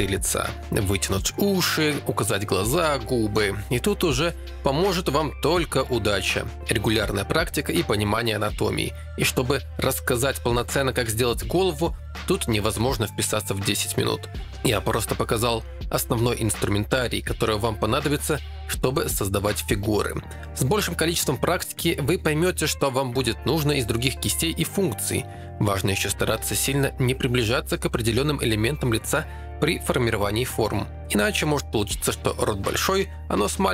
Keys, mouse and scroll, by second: 0.4 ctrl+Tab, 0.4 1, 0.6 alt+f, 3.8-4.2 typing, 5.2-6.0 typing, 6.0 ctrl+i, 6.7 alt+m, 7.5 2, 7.8 ctrl+z, 7.9 f, 9.6 ctrl+alt+z, 10.8 ctrl+Tab, 10.8-16.1 typing, 12.0 Tab, 12.4 click, 13.1 ctrl+r, 13.3 ctrl+Tab, 13.3 right click, 13.6 ctrl+Tab, 14.0 click, 15.2 click, 16.9 ctrl+Tab, 17.3 g, 17.3 f, 19.1 1, 19.3 f, 19.6 click, 20.1 click, 21.2-23.4 typing, 26.1 g, 26.3 f, 27.1 click, 28.1-29.2 typing, 28.1 ctrl+Tab, 28.8 ctrl+Tab, 30.1 middle click, 33.3 g, 33.5 f.